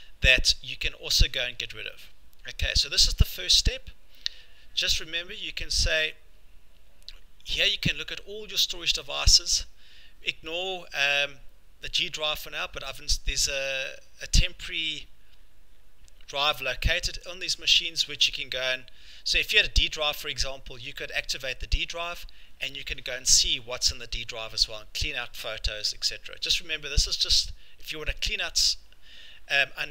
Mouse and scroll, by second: 2.6-6.1 scroll, 6.1 click, 17.1 click, 17.2 click, 18.8 click, 21.3 click.